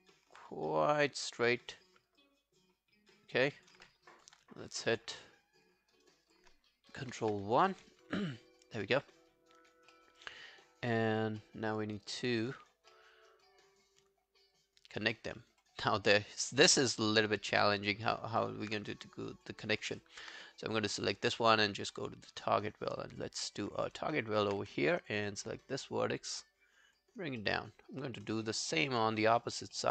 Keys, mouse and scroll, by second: 3.4 alt+click, 4.3 ctrl+i, 4.8 ctrl+i, 5.4 right click, 7.0 ctrl+i, 7.4 ctrl+scroll down 1, 7.7 alt+middle click, 7.9 alt+right click, 8.2 alt+click, 8.9 alt+middle click, 9.1 alt+right click, 9.3 alt+click, 9.9 alt+middle click, 10.2 alt+right click, 10.4 alt+click, 11.4 alt+middle click, 11.9 alt+scroll down 1, 12.1 alt+click, 12.7 alt+scroll up 3, 12.9 alt+middle click, 13.3 alt+right click, 14.3 alt+scroll down 1, 14.6 alt+click, 15.4 alt+middle click, 16.0 alt+click, 18.4 alt+middle click, 18.8 right click, 20.0 alt+middle click, 21.2 shift+right click, 23.9 alt+click, 24.6 w, 27.4 alt+middle click, 27.8 alt+scroll down 1, 28.0 alt+click, 28.7 alt+middle click, 29.0 alt+right click, 29.3 alt+click, 29.8 alt+middle click.